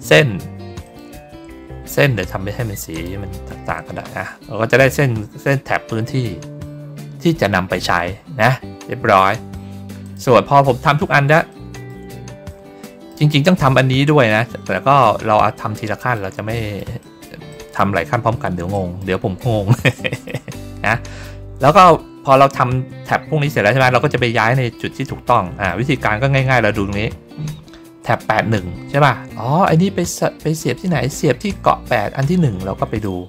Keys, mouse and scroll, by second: 0.7 shift+click, 2.8 shift+click, 4.7 middle click, 4.8 middle click, 8.6 ctrl+scroll down 1, 9.9 click, 10.5 ctrl+scroll up 1, 11.4 middle click, 12.3 ctrl+scroll up 1, 12.7 middle click, 15.6 middle click, 16.4 middle click, 16.9 middle click, 17.4 middle click, 18.1 ctrl+scroll down 1, 18.6 middle click, 19.8 middle click, 20.8 middle click, 25.2 middle click, 25.9 ctrl+middle click, 26.2 ctrl+middle click, 32.9 middle click.